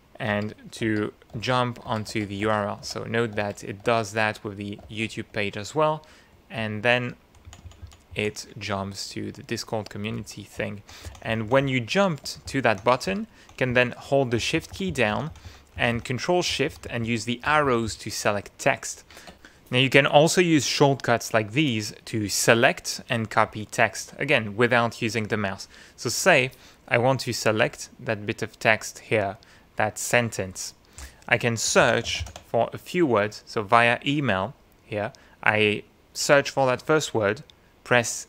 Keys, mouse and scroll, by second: 0.3 Tab, 4.8 shift+Tab, 6.6 Up, 7.4 Down, 10.2 shift+Right, 11.0 shift+Left, 12.4 shift+Right, 13.1 shift+Left, 13.7 shift+Right, 15.1 ctrl+shift+Left, 15.7 ctrl+shift+Right, 16.5 ctrl+shift+Left, 17.8 ctrl+shift+Right, 27.7-30.7 drag, 31.0 click, 31.8 ctrl+f, 32.1 ctrl+shift+v, 32.2 ctrl+shift+i, 32.3 ctrl+shift+a.